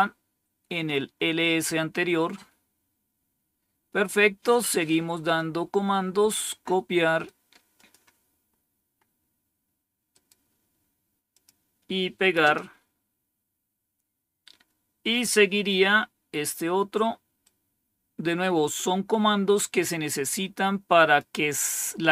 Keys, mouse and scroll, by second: 1.5-2.3 scroll down 2, 2.3-2.9 scroll down 1, 5.2-6.3 drag, 6.9 right click, 7.6 click, 8.4-9.0 scroll down 3, 10.0 right click, 11.2 click, 12.3 Return, 15.4-15.8 scroll down 2, 17.3-21.1 drag.